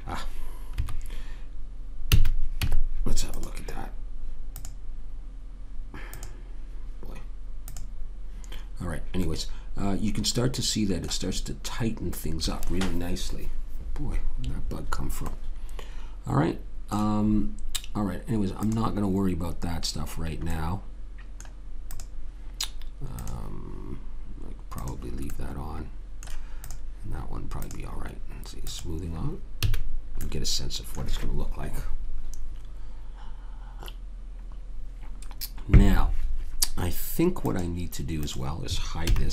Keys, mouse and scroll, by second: 0.7 Escape, 2.1 a, 2.6 Tab, 4.5-9.3 drag, 8.9 right click, 9.6-13.3 middle drag, 13.3-13.6 scroll up 1, 13.6-15.3 scroll down 1, 15.3 middle click, 16.6-18.3 middle drag, 18.6 click, 20.0-23.3 middle drag, 21.9-26.4 drag, 25.3-27.6 middle drag, 29.6 a, 29.9 middle click, 30.2 click, 37.5-39.0 drag, 39.0 h.